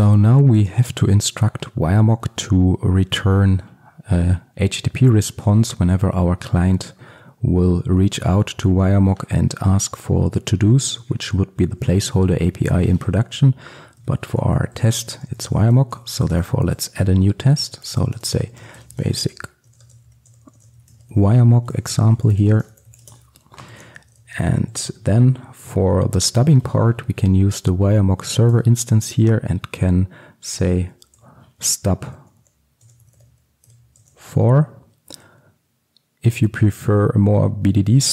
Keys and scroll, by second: 16.3 Return, 28.6 Return.